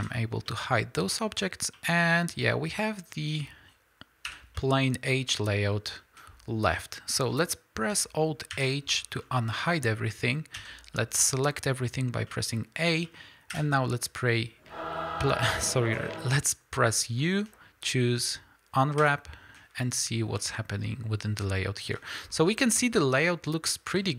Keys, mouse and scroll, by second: 0.0 h, 0.3 scroll down 2, 0.5-6.1 middle drag, 1.4 scroll up 2, 4.3 l, 8.5 alt+h, 9.1 middle click, 9.8 scroll down 1, 10.6 a, 11.0 middle click, 13.6 u, 20.4-22.7 middle drag, 22.7-23.1 scroll up 2, 23.1-23.8 scroll down 2, 24.0 scroll down 1.